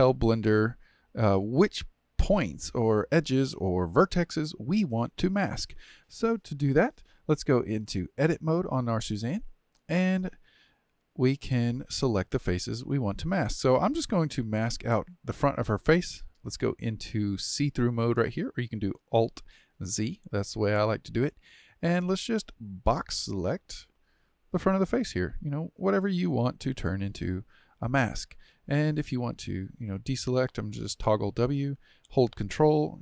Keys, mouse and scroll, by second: 6.0-7.5 drag, 8.1 Tab, 9.2-12.3 middle drag, 12.7 KP_1, 13.6 KP_3, 14.4-17.3 shift+middle drag, 17.3-19.6 drag, 19.6 alt+z, 20.0 alt+z, 22.9-24.1 drag, 28.5 shift+middle click, 29.1-29.6 scroll up 5, 29.6 shift+middle click, 30.3 w, 32.4-33.0 ctrl+drag.